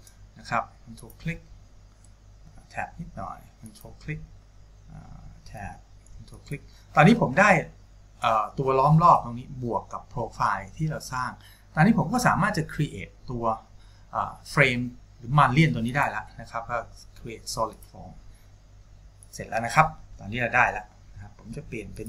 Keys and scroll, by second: 2.6 Tab, 5.9 Tab.